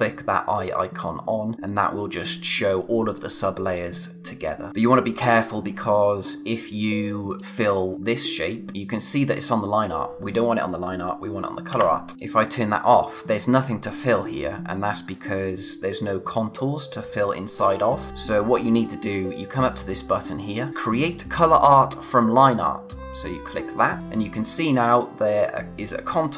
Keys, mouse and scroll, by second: 0.9 click, 6.8 click, 11.3 ctrl+Num_Lock, 11.7 ctrl+z, 12.1 click, 23.1 click.